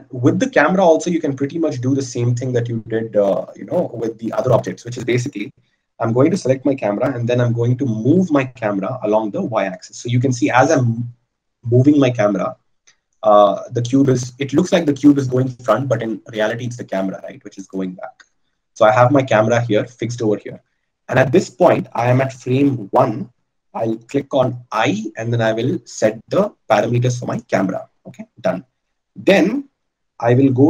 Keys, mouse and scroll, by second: 7.4 g, 25.0 i.